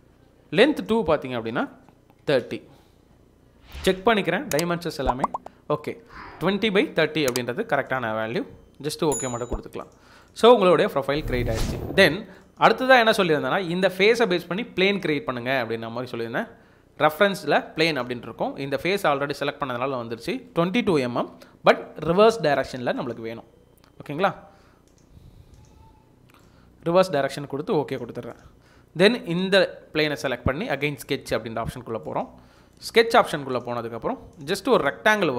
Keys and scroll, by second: 2.0-2.9 typing, 21.1 typing.